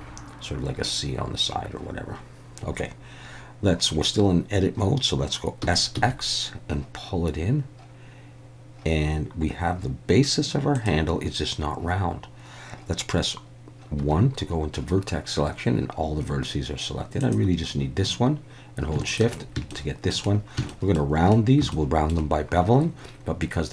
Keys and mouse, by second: 5.6 s, 5.9 x, 10.7 click, 14.0 1, 17.2 click, 19.1 shift+click, 19.7 shift+middle click, 20.7 shift+middle click, 21.7 shift+middle click.